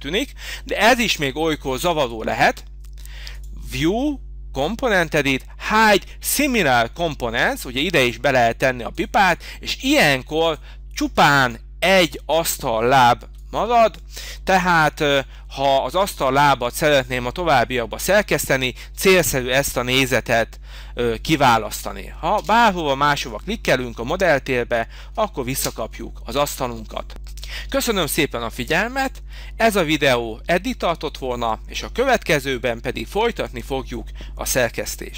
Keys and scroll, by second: 13.1 h, 22.3 space.